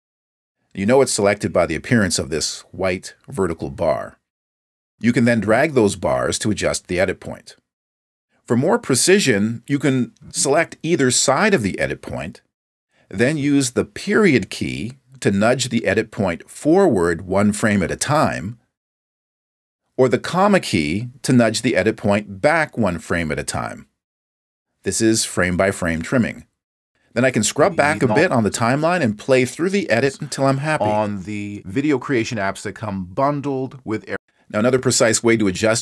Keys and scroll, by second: 15.2 •, 19.9 ,, 25.6 ., 29.9 space, 34.1 space.